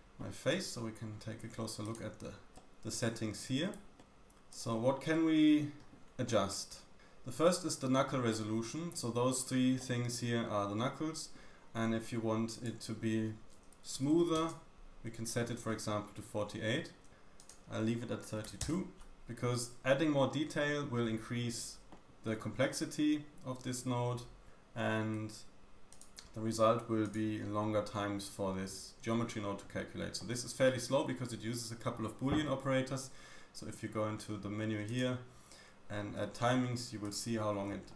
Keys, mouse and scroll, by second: 1.1-1.8 scroll down 5, 1.8-2.2 drag, 2.2 middle click, 2.2-3.0 scroll up 3, 2.5 shift+click, 3.3-4.0 middle drag, 3.3-3.8 scroll up 3, 4.0 click, 4.0 g, 5.1-10.0 middle drag, 7.9-8.3 scroll up 1, 8.3-9.8 scroll down 1, 10.2-10.7 scroll up 3, 10.7 middle click, 12.5 click, 15.6-16.3 middle drag, 16.3-37.6 drag, 37.6-37.9 middle drag.